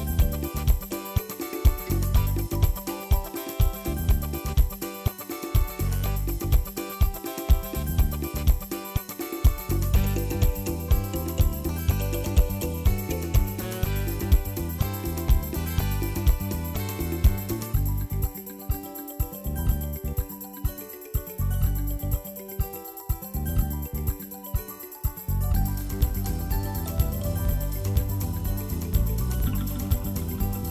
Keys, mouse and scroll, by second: 0.0 scroll up 3, 0.3 ctrl+s, 0.4 shift+middle click, 0.6 click, 0.7 scroll down 2, 1.0 Tab, 1.1 scroll up 2, 1.3 shift+middle click, 1.8 Tab, 2.0 Tab, 2.4 alt+z, 2.8 3, 4.0 c, 7.8 Tab, 8.0 alt+z, 8.2 shift+middle click, 8.3 scroll down 2, 8.4 Tab, 8.9 shift+d, 10.0 p, 10.3 Tab, 10.5 click, 10.9 ctrl+s, 11.8-13.4 drag, 14.1 middle click, 14.2-15.1 scroll up 1, 15.1-16.6 drag, 16.6 KP_1, 17.0-18.6 shift+middle drag, 18.6-19.2 scroll down 5, 19.2 shift+click, 19.6 KP_Divide, 20.4 KP_1, 21.0 Delete, 21.2 KP_1, 21.4 scroll up 7, 21.6 shift+middle click, 21.8 shift+drag, 22.1-22.9 scroll up 2, 22.3 drag, 22.9 shift+click, 23.2 KP_Divide, 23.4 middle click, 23.6 drag, 23.7 middle drag, 23.9 scroll up 1, 24.0 click, 24.9 ctrl+a, 25.3 middle click, 25.6 KP_1, 25.7 scroll up 2, 25.8-26.3 scroll down 1, 26.3 click, 26.8 middle click, 27.2-28.2 drag, 28.9 ctrl+z, 29.1-29.9 middle drag, 29.9 Tab, 30.5 ctrl+r.